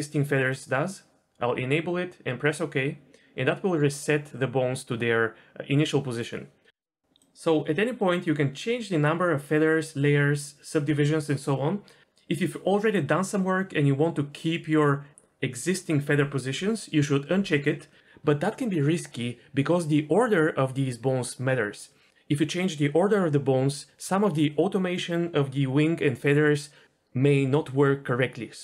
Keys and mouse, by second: 7.1-28.6 drag.